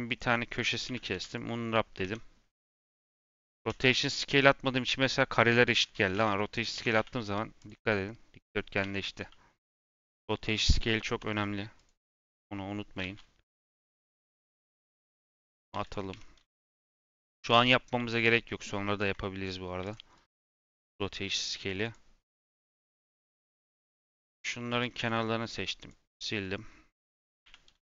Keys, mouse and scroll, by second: 0.0 click, 0.8 a, 1.0 u, 1.9 Tab, 2.4 b, 3.5 ctrl+a, 4.1 Tab, 5.7 b, 6.1 ctrl+a, 6.7 Tab, 6.9 a, 7.2 u, 8.7 Tab, 9.1 h, 9.8 click, 10.3 Tab, 10.7 b, 11.3 2, 11.7 click, 12.9 ctrl+z, 14.2 click, 14.7 click, 15.4 a, 15.6 u, 16.0 Tab, 16.3 h, 16.8 click, 17.2 middle click, 17.6-18.1 scroll up 2, 18.1-18.7 scroll down 1, 18.9 ., 19.8 shift+click, 20.1 click, 20.3 Tab, 20.6-21.8 middle drag, 21.8 click, 22.2 click, 23.0 click, 23.3 click, 23.7 click, 24.6 click, 25.4 click, 25.7 click, 26.4-27.4 middle drag, 27.4 a.